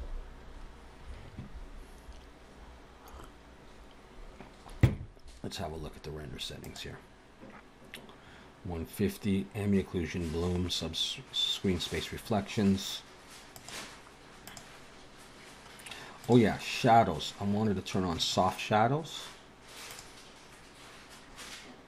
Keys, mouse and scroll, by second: 6.7 click, 13.6 click, 14.5 click, 16.3 click, 16.7 scroll down 3, 18.2 click, 19.8 click.